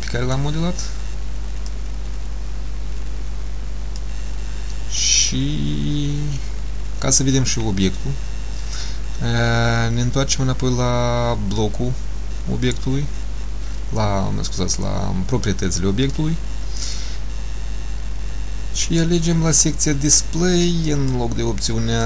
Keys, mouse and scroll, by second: 1.8 click, 5.1 middle click, 11.7 click, 21.0 click.